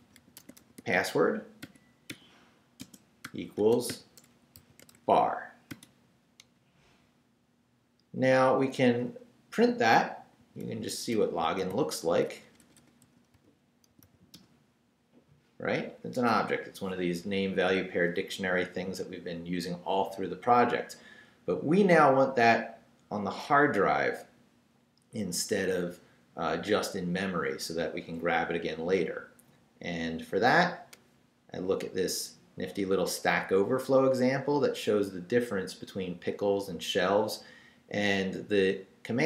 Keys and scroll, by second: 0.0-5.7 typing, 6.4 Return, 10.4-14.5 typing.